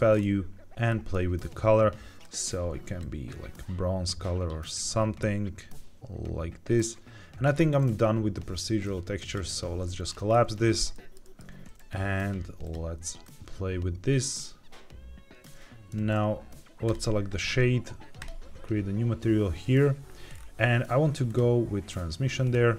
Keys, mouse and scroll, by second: 0.1 scroll up 2, 0.8 shift+middle click, 2.1 click, 8.7 click, 10.0 scroll down 2, 10.7 scroll down 1, 10.8 shift+middle click, 11.1 shift+middle click, 12.5 click, 16.8 click, 18.1 click, 20.2-21.1 scroll down 2, 21.2 click, 21.9 click.